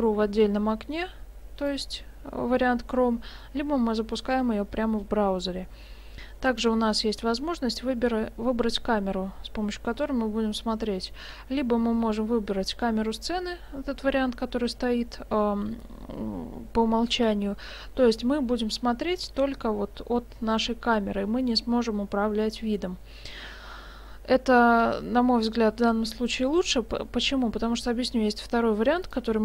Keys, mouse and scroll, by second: 1.6 click, 29.0 click.